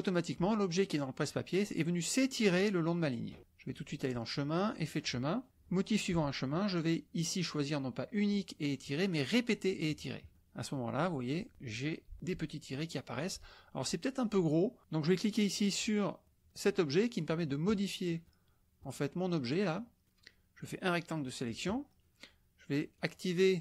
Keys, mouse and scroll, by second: 3.7 drag, 4.7 click, 7.5-9.7 drag, 17.6-17.9 drag, 20.6-21.6 drag, 22.9 click, 23.5 click.